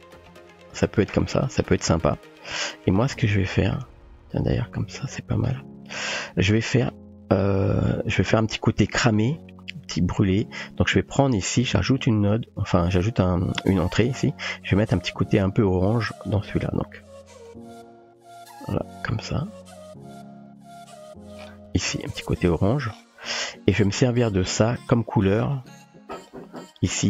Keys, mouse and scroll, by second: 1.1-1.6 shift+middle drag, 2.7-5.1 drag, 7.7 click, 8.1 typing, 8.9 middle click, 10.2 click, 12.1 click, 16.3 click, 23.9-24.4 middle drag, 25.6 click, 26.4 typing.